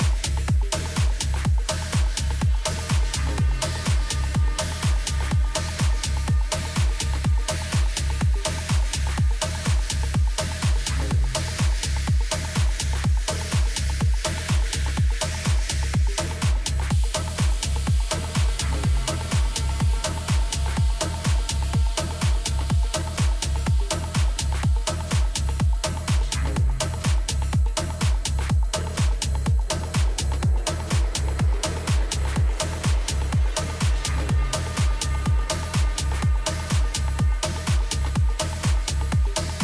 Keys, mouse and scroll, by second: 5.3 shift+d, 9.2-11.2 middle drag, 11.9-13.7 drag, 16.3-19.4 middle drag, 21.0-23.5 middle drag, 25.7 p, 28.4 Tab, 29.2-30.4 right drag, 29.8-32.2 middle drag, 34.0 KP_1, 34.2 z, 35.1 middle click, 37.0 z.